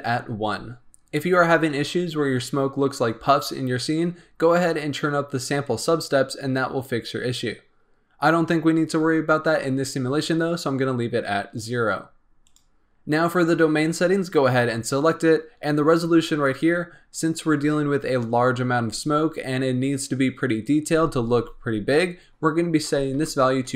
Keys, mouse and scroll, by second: 12.4 click, 16.4-23.6 drag, 23.6 KP_0.